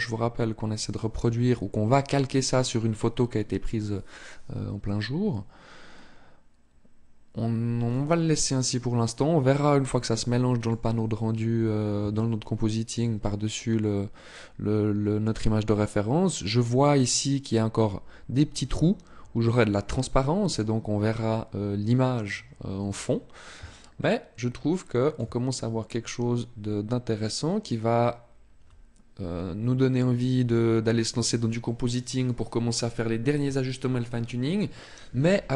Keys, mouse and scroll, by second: 7.6 click, 11.0 scroll up 1, 11.9 shift+middle click, 12.9-13.3 scroll up 1, 21.8-22.7 scroll down 1, 22.7-23.6 scroll down 1, 23.6 shift+middle click.